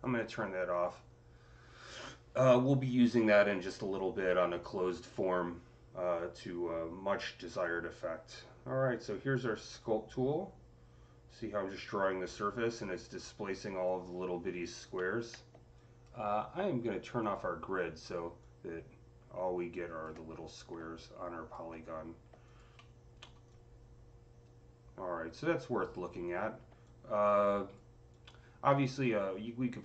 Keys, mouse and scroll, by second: 0.6 click, 7.5-15.6 drag, 7.5 c, 15.6-18.3 alt+drag, 18.3-20.2 alt+drag, 20.2 scroll up 3, 20.9 alt+click, 21.7-22.2 scroll down 3, 22.3 alt+click, 22.7-27.9 alt+middle drag, 23.3-29.8 alt+drag.